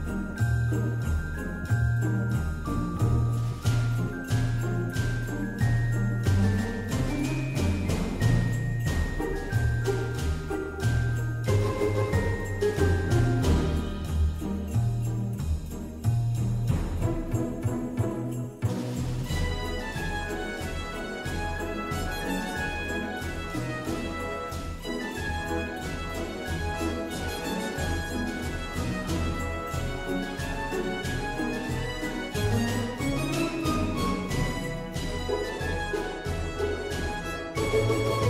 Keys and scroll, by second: 12.0 ctrl+shift+g, 18.6 ctrl+shift+], 23.2 ctrl+c, 23.7 ctrl+g, 24.2 ctrl+c, 24.5 ctrl+f, 35.6 ctrl+g.